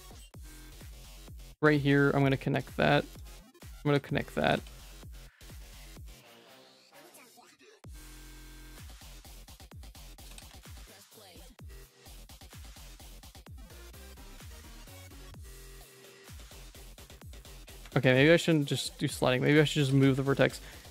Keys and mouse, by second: 0.1 click, 0.5 g, 1.9 j, 2.2 click, 3.5 middle click, 3.9 j, 4.4 g, 5.6 middle click, 6.0 ctrl+s, 6.2 2, 6.3 click, 6.5 right click, 7.3 right click, 8.5 click, 9.3 shift+middle click, 9.5 1, 9.8 click, 10.1 g, 11.0 click, 11.5 g, 12.8 j, 13.7 shift+click, 14.0 j, 14.4 Tab, 14.6 middle click, 15.3 Tab, 15.8 middle click, 17.0 g, 18.4 middle click, 19.8 g, 20.7 click.